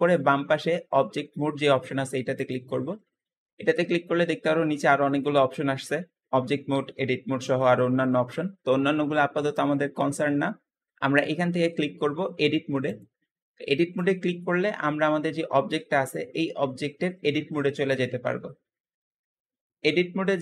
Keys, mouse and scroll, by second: 2.2-5.4 drag, 18.6-19.3 scroll up 1, 19.3 click.